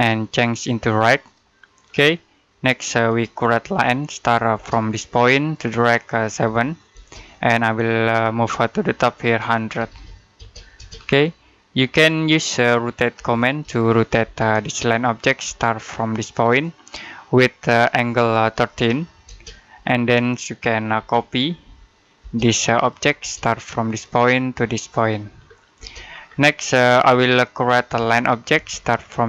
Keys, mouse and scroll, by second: 1.7-2.1 scroll down 1, 2.1 middle click, 3.5 l, 4.4 space, 4.8 click, 6.3 7, 6.8 space, 9.4-10.3 typing, 10.9 scroll down 1, 11.3 middle click, 13.0-14.1 typing, 14.3 click, 15.3 space, 16.3 click, 18.1-19.1 typing, 20.8-23.0 typing, 22.3 click, 23.7 click, 25.3-25.6 scroll down 1, 25.6 space, 25.9-26.4 scroll down 1, 26.4 middle click, 26.9 scroll up 1, 27.8-28.4 typing.